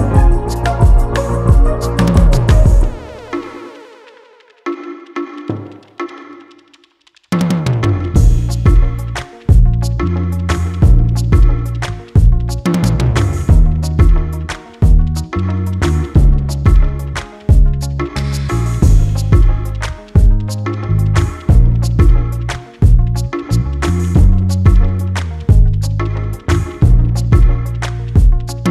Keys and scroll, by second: 0.9 Return, 2.1 alt+Return, 4.9 ctrl+alt+s, 27.7 alt+Return.